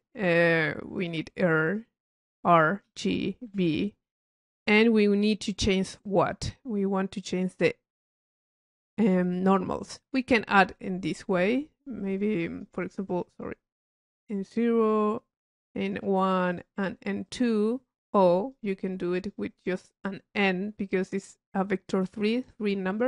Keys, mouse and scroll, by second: 1.0 click, 10.6 click, 12.0 click, 14.9 click, 15.8 click, 16.5 click, 17.2 click, 18.1-18.5 drag, 19.0 click, 19.9 click, 22.3 click.